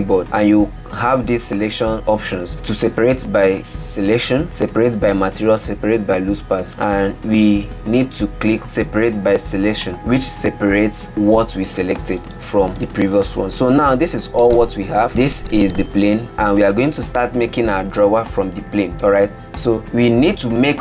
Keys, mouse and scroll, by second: 0.2 p, 13.6 Tab, 14.1 click, 14.7 click, 15.1-19.3 middle drag.